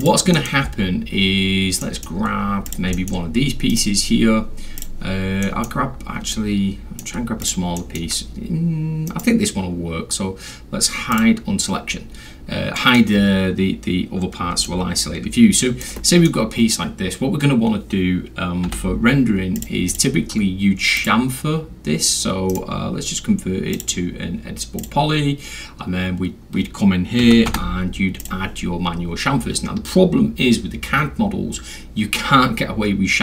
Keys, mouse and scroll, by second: 0.0 click, 0.4 middle click, 0.4 scroll, 0.7 scroll up 2, 0.8-1.5 scroll, 1.5 scroll down 2, 1.7 scroll, 1.8 middle drag, 2.3 scroll up 2, 2.5 scroll, 2.7 click, 2.9 middle drag, 3.3 scroll down 2, 3.4 scroll, 3.7 right click, 4.8 click, 5.2 scroll down 2, 5.3 scroll, 5.4 middle click, 6.2 alt+scroll, 6.3 alt+middle click, 7.4 alt+click, 7.8 alt+middle drag, 8.0 scroll up 2, 8.2-8.6 scroll, 9.1 right click, 11.1 click, 11.9 middle click, 11.9 scroll up 2, 12.4 middle click, 12.4 scroll down 2, 12.5-13.0 scroll, 12.8 middle click, 14.7-15.8 alt+middle drag, 16.1 alt+middle click, 16.4 middle click, 16.4 scroll, 19.0 g, 19.6 click, 19.9 click, 21.0 click, 22.5 right click, 23.7 click, 24.8 click, 27.2 c, 27.9 h, 28.2 click.